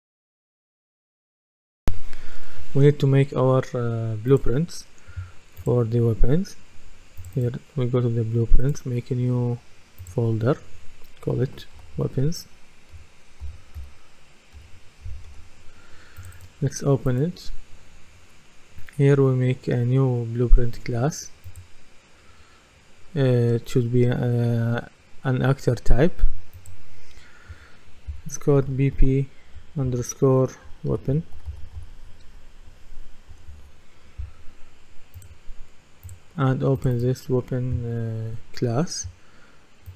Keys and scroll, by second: 11.5-14.6 typing, 15.3 Return, 28.6 shift+b, 30.7-32.7 typing, 33.3 Return.